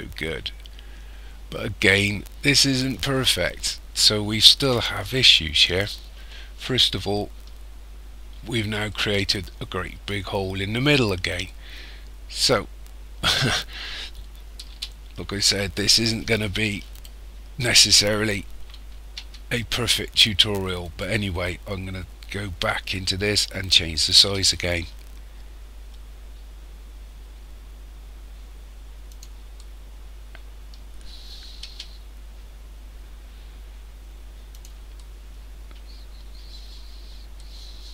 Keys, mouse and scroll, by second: 2.6 middle click, 8.9 middle click, 11.4 middle click, 14.7 KP_1, 16.9 right click, 19.2 Tab, 20.8 right click, 24.2 s, 29.6 middle click, 31.7 s, 35.0 middle click, 36.2-36.8 scroll up 3, 37.4 middle click.